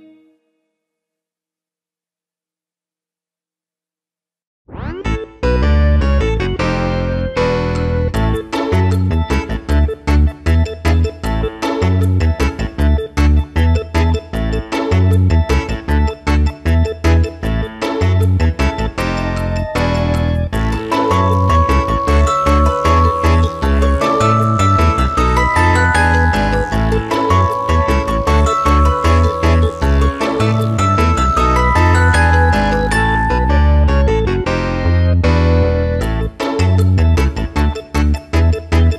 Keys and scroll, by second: 2.6 f, 3.3 space, 3.7 space, 4.3 w, 5.7 2, 6.1 Return, 6.5 shift+F2, 7.1 ctrl+space, 8.4 s, 8.6 ctrl+space, 10.3 Return, 12.9 [, 19.5 space, 22.5 space, 26.5 space, 29.1 space, 30.3 space, 31.3 space, 34.3 space, 35.6 space, 37.5 space, 37.8 ctrl+KP_Subtract, 38.7 space.